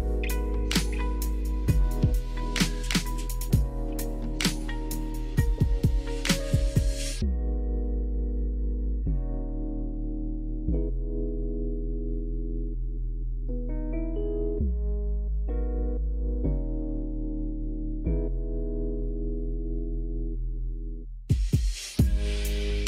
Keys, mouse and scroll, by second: 0.4-2.6 drag, 5.1 click, 5.3 click, 6.4-7.4 drag, 7.7-9.0 drag, 11.4 click, 12.4 click, 13.5-14.9 drag, 15.2 click, 16.1-16.5 shift+middle drag, 18.8 middle click, 19.4 KP_1, 20.2 shift+middle drag.